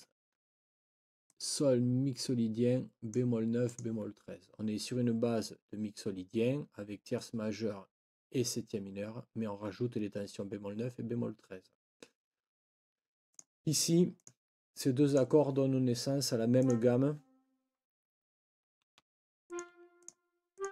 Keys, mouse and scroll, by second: 1.3-3.3 drag, 3.7 click, 13.3 click, 14.1 click, 15.1 click, 16.6 click, 18.9 Delete, 19.6 click, 19.7 Delete, 20.0 click, 20.5 click.